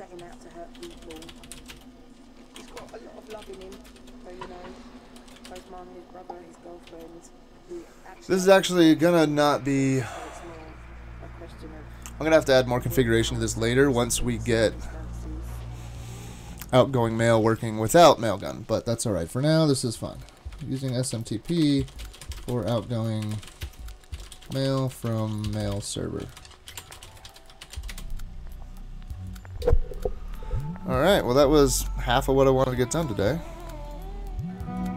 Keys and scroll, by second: 0.0-6.9 typing, 20.4-28.3 typing.